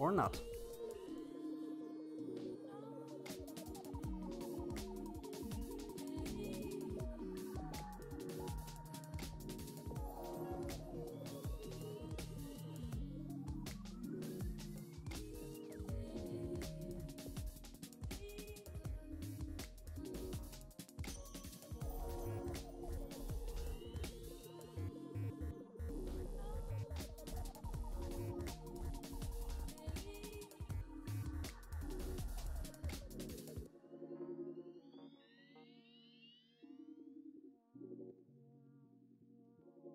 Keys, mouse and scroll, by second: 2.1-3.7 middle drag, 5.9-7.5 drag, 9.8-11.3 drag, 13.3-14.7 drag, 14.7-16.4 middle drag, 16.7-18.2 middle drag, 19.4-20.9 drag, 22.8-24.2 drag, 24.9-26.5 middle drag, 26.8-28.3 middle drag, 32.8-34.3 drag, 38.3-39.8 middle drag.